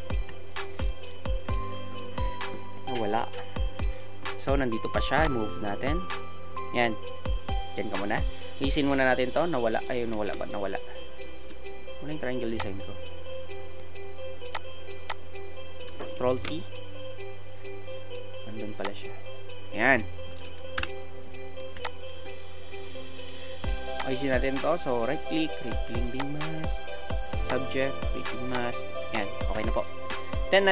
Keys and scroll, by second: 10.1 ctrl+z, 16.3 ctrl+t, 20.8 Return.